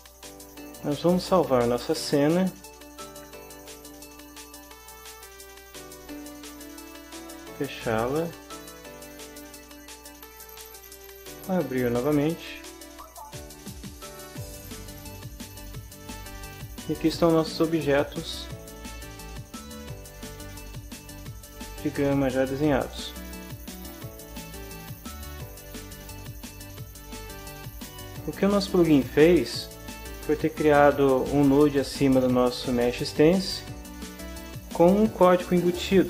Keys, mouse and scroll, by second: 3.0 ctrl+s, 5.4 click, 7.6 click, 8.7 click, 10.3 click, 13.6 click, 14.7 click, 17.4-17.7 scroll up 1, 18.2-20.0 middle drag, 21.4 shift+middle click, 21.8 shift+click, 22.6-24.7 drag, 27.1 middle click, 27.5-28.5 drag, 28.5-29.5 middle drag.